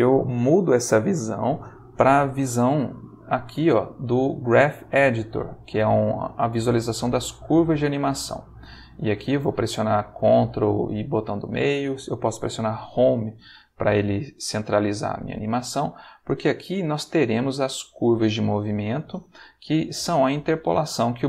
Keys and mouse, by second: 2.6 click, 6.2-7.7 middle drag, 7.8 ctrl+middle click, 8.9 ctrl+middle click, 9.6-11.8 ctrl+middle drag, 12.8 Home, 16.1 click, 18.8 click.